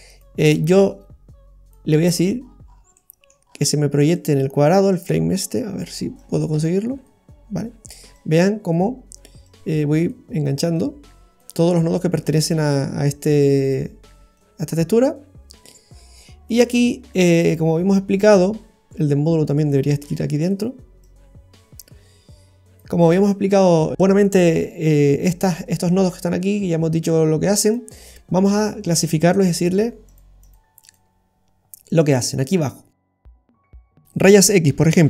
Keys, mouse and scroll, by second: 0.7 click, 2.4-3.0 scroll up 8, 2.9 middle click, 3.5 scroll up 1, 4.1 middle click, 4.9 click, 8.1 click, 9.5 click, 10.8 click, 11.8-12.6 scroll down 4, 13.1 click, 14.4 click, 15.7 click, 17.0-17.5 scroll down 3, 17.4 middle click, 18.2-18.7 scroll up 5, 19.7 click, 21.0 click, 23.0-23.5 scroll down 2, 23.2 middle click, 23.9 scroll down 2, 27.6 click, 29.0 click, 30.4 click, 30.8 click, 31.9 click.